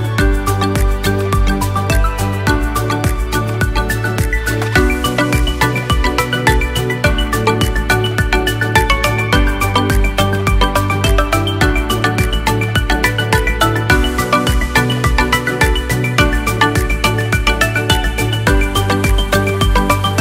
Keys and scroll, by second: 8.6 Delete, 13.9 ctrl+z, 14.7 ctrl+z.